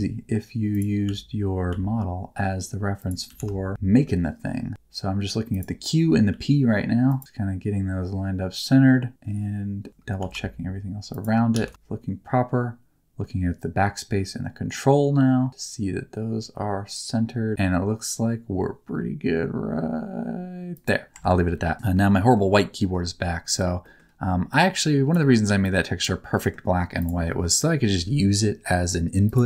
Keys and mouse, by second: 0.7 shift+middle click, 1.6 s, 2.9 click, 3.2 g, 3.7 shift+middle click, 4.7 shift+g, 5.5 shift+click, 6.3 s, 7.0 click, 7.0 right click, 7.2 g, 10.2 s, 11.1 shift+click, 11.5 g, 20.7 shift+click, 21.7 Tab, 21.7 middle click, 22.8 middle click, 23.9 middle click, 25.6 click, 26.4 middle click, 26.9 click, 27.3 middle click, 29.2 click.